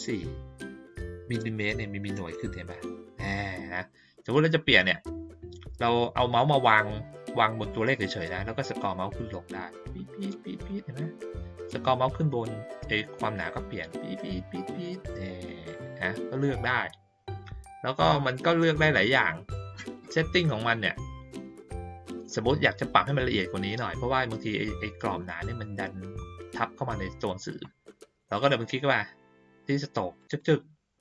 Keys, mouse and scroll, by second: 8.8 middle click, 9.2-9.5 scroll down 1, 9.5 scroll up 1, 9.7 scroll down 1, 12.6 middle click, 13.2 middle click, 13.5 middle click, 13.8 middle click, 14.4 middle click, 14.6 middle click, 18.9-20.4 scroll down 1, 20.4-21.7 scroll down 1, 30.1 click, 30.3 click.